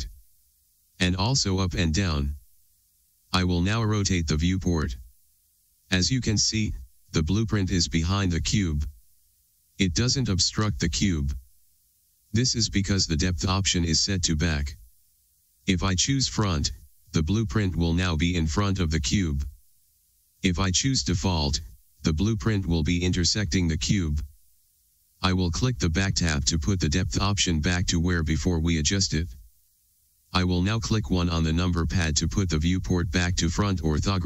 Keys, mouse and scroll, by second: 1.4 ctrl+z, 3.7 ctrl+z, 5.1-16.4 middle drag, 17.3 click, 21.6 click, 26.8 click, 32.2 KP_1.